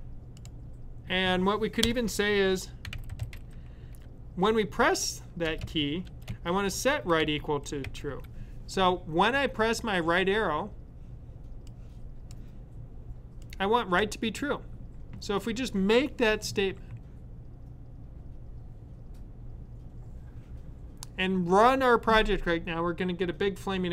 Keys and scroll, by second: 2.5-4.3 typing, 5.3-8.4 typing.